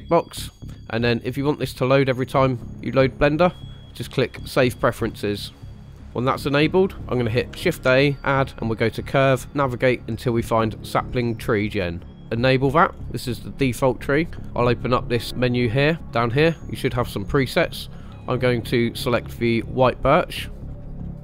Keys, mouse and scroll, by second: 7.6 shift+a, 12.9 scroll up 1, 13.0 scroll down 1, 14.4 click, 16.6-20.6 drag, 20.6 scroll down 3, 20.8 shift+middle click, 21.0 scroll up 1, 21.1 shift+middle click.